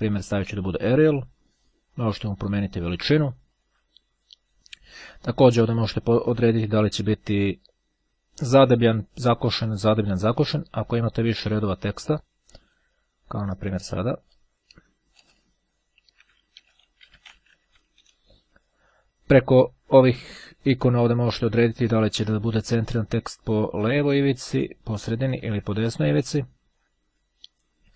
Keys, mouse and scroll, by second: 0.6 click, 2.4 click, 3.6 click, 5.2 click, 6.1 click, 7.4 click, 8.7-9.9 drag, 12.8 click, 14.2 click, 15.0 Return, 15.8-18.4 typing, 21.2 click, 22.3 click, 24.5 click, 25.6 click.